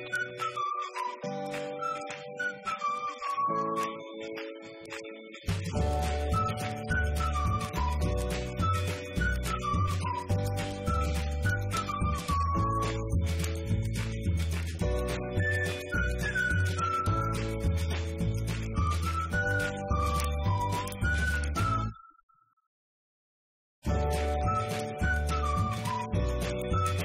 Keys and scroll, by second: 0.3 Up, 0.5 Right, 1.9 Left, 2.5 Delete, 3.1 Right, 3.6 Left, 5.0 Right, 5.8 Left, 6.9 5, 7.3 Return, 9.1 Up, 9.6-10.5 typing, 11.6 Up, 12.0-12.9 typing, 12.9 Up, 13.2 Left, 13.3 Down, 13.5 Left, 14.5 Up.